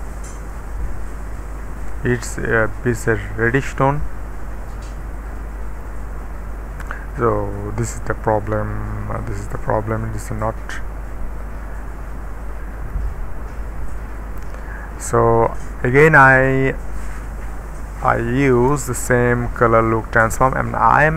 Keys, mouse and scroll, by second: 0.3 click, 2.2-3.3 middle drag, 2.8-3.4 scroll up 1, 3.6-4.5 scroll down 2, 4.5-6.6 middle drag, 6.8 middle click, 10.0 middle click, 10.4-13.0 scroll up 1, 13.0-13.6 middle drag, 13.6-14.4 scroll down 1, 15.2 middle click, 16.3 click, 18.5 Return.